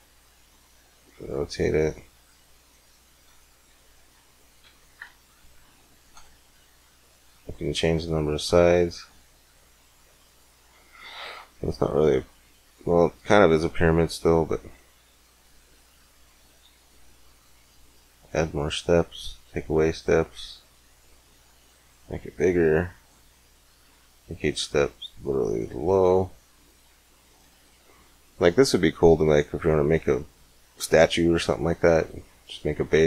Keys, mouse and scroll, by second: 1.6-3.1 drag, 6.5 middle click, 7.7-9.4 drag, 10.1-11.4 middle drag, 13.8-15.4 drag, 16.0-17.9 drag, 20.3-24.0 drag, 25.5-27.2 middle drag, 27.8-29.4 middle drag, 30.3-32.1 middle drag.